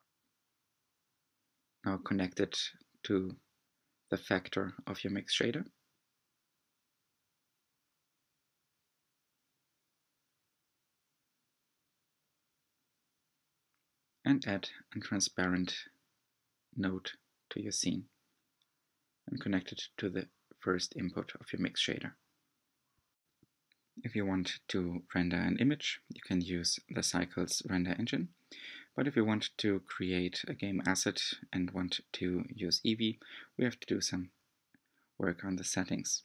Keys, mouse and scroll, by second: 0.0 drag, 1.0 scroll up 3, 5.7-7.8 drag, 7.8 g, 8.3 click, 30.9 scroll down 5, 31.5-32.3 scroll down 1.